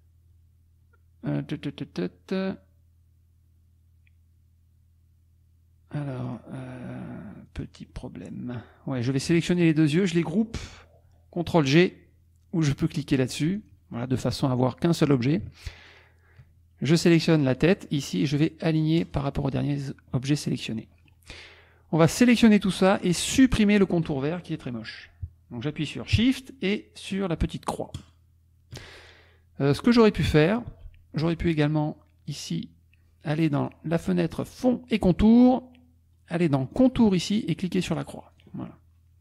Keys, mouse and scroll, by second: 6.2 click, 7.6 click, 7.9-9.0 scroll up 2, 9.0 click, 9.5 shift+click, 13.6 click, 15.9 shift+click, 19.0 click, 19.6 click, 20.8 click, 23.3-26.2 scroll up 1, 27.9 shift+click, 30.7 ctrl+z, 33.5 click, 36.7 click, 37.8 click, 38.3 click, 38.7-39.2 middle drag, 38.7-39.2 scroll down 1.